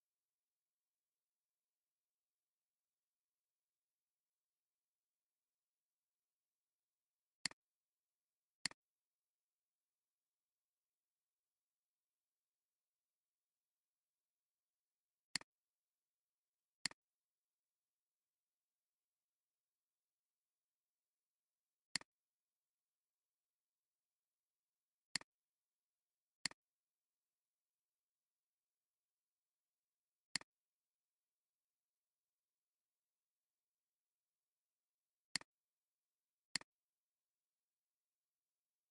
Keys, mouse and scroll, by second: 3.5-5.3 drag, 12.1 click, 16.9 click, 22.0 click, 23.9 click, 37.8-38.9 typing.